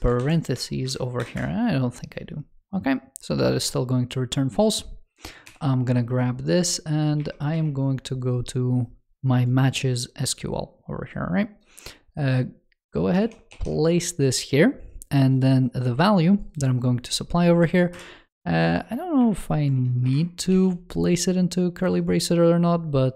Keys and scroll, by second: 5.3 super+c, 7.0 super+2, 13.1 super+v, 13.3 super+s, 18.7 alt+BackSpace, 20.3 super+s.